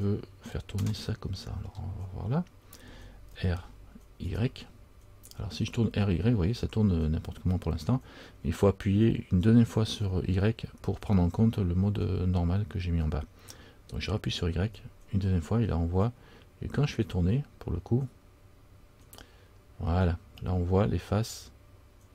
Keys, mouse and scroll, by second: 1.1 scroll down 1, 1.2 middle click, 3.5 r.